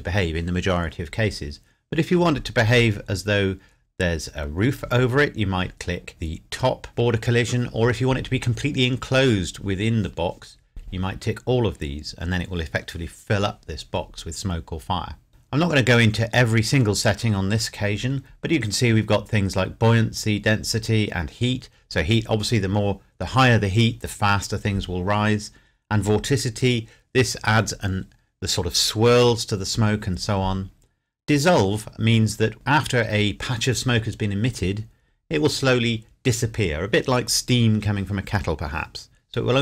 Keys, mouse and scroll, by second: 15.3 scroll down 1, 16.4 scroll up 1, 17.1-18.1 scroll down 1, 32.1-33.5 scroll up 1.